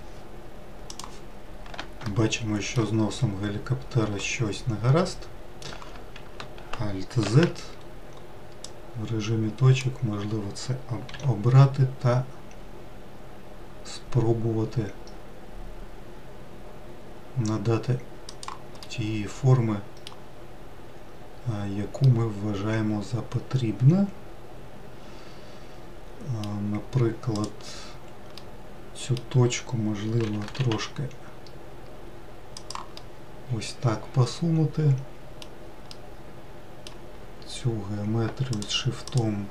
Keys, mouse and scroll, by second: 2.7-3.8 shift+middle drag, 3.8-6.2 scroll up 2, 7.9 alt+z, 9.3 click, 11.7 g, 19.4-21.5 middle drag, 21.5-22.2 scroll up 1, 22.7-25.7 middle drag, 28.0 click, 29.0-30.9 middle drag, 30.9 g, 33.6-39.2 middle drag, 39.2 shift+click.